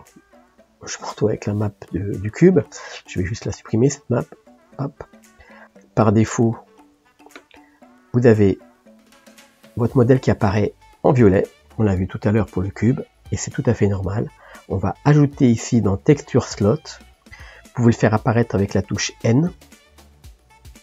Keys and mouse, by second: 4.7 click, 7.8-13.9 middle drag, 13.9-17.3 drag, 17.3 n, 17.9 n, 18.4 n, 19.8 n.